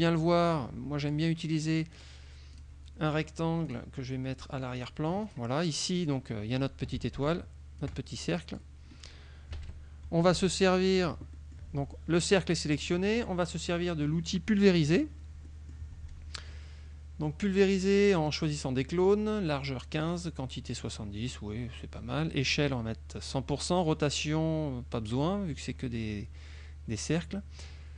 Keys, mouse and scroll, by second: 0.6 click, 2.7 click, 3.7 click, 4.9 click, 5.3 click, 6.1 click, 7.3 ctrl+click, 8.3 ctrl+click, 9.6 KP_Subtract, 11.1 click, 11.7 click, 14.9 click, 15.5 middle click, 23.9-25.3 drag.